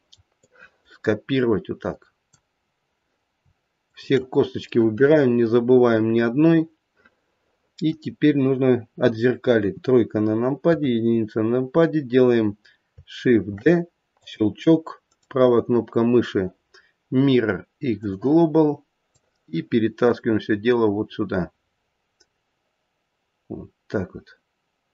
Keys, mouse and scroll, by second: 0.4 click, 3.8 shift+click, 4.6 middle click, 5.5 middle click, 7.5 middle click, 7.7 middle click, 9.5 KP_3, 10.6 KP_1, 13.4 shift+d, 15.0 right click, 19.1 click.